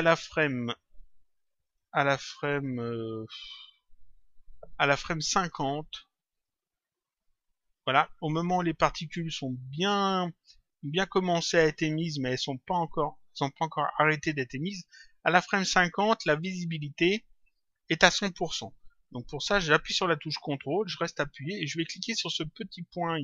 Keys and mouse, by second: 1.6 click, 6.2 click.